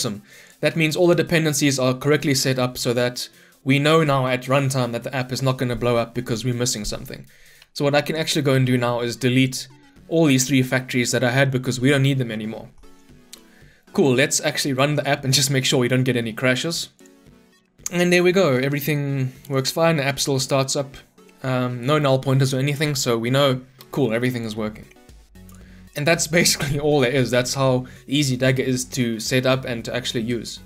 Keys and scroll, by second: 8.6 Delete, 14.7 shift+F10.